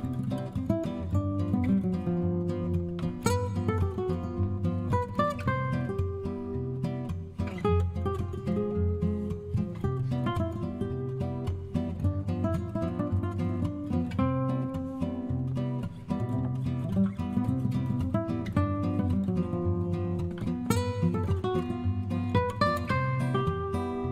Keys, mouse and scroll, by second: 2.9 click, 7.0-7.8 scroll down 2, 7.8-8.6 scroll down 1, 8.6-9.3 scroll down 1, 9.3-11.9 scroll down 1, 11.9-12.7 scroll down 1, 12.7-15.4 scroll down 1, 16.3-18.3 drag, 18.5-19.7 scroll down 2, 22.1 click.